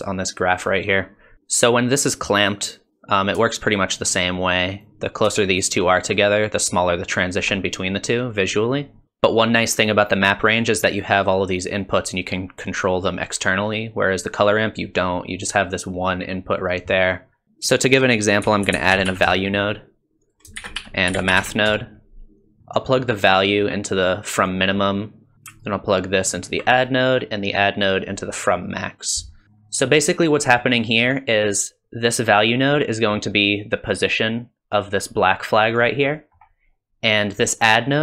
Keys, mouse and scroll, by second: 1.3 ctrl+shift+click, 3.5 shift+click, 5.4 shift+click, 15.9 click, 20.3-20.6 typing, 22.6 scroll down 2, 22.6 middle click, 23.7 click, 25.3 super+right click, 25.3 click, 25.8 alt+right click, 27.2 click, 29.4 middle click, 29.4 scroll up 2, 29.7 scroll down 1, 30.5 middle click, 32.9 middle click, 34.0 click, 36.1 middle click.